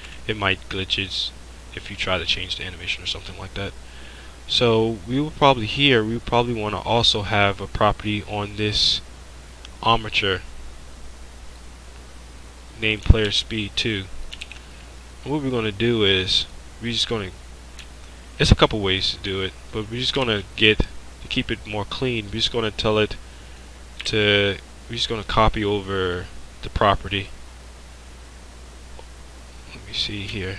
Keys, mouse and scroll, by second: 0.0 ctrl+Down, 3.2 click, 6.7-13.3 drag, 13.3 ctrl+c, 16.5 drag, 20.2 shift+a, 24.0 click, 24.1 shift+a.